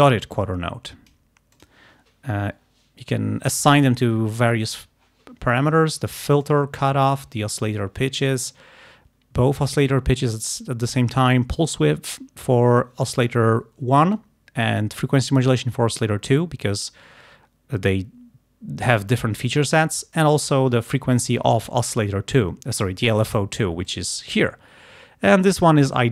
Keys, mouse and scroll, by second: 1.6 click, 3.6 click, 6.5 click, 23.9 click.